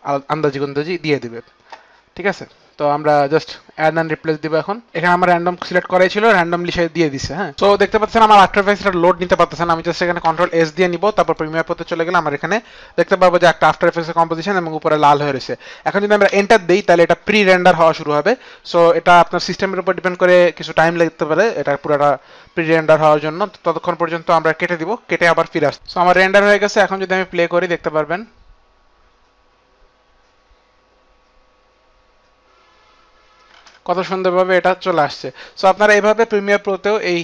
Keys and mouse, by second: 4.0 click, 7.5 click, 10.2 ctrl+s, 11.3 ctrl+s, 11.3 click, 15.3 click, 16.3 Return, 25.8 click, 26.4 space, 34.0 space.